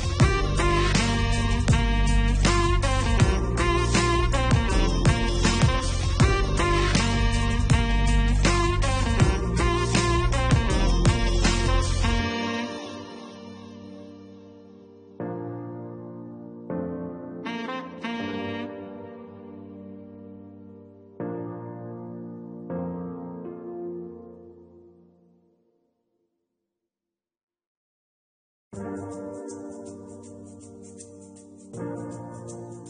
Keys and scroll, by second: 27.3 Delete.